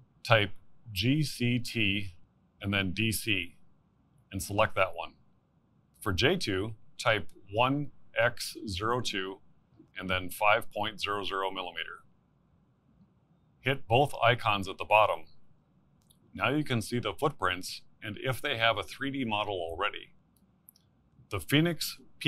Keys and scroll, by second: 8.5-10.7 typing.